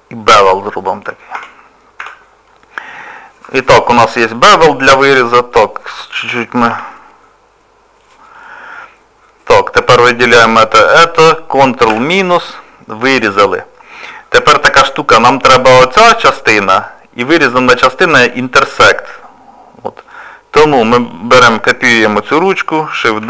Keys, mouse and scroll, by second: 0.3 middle click, 1.3 Tab, 2.0 z, 2.5 middle click, 4.0-4.6 scroll down 3, 4.8 shift+middle click, 5.5 click, 6.7 g, 8.3 click, 9.8 click, 10.5 shift+click, 10.6 shift+click, 11.9 ctrl+KP_Subtract, 18.4 click, 20.1 click.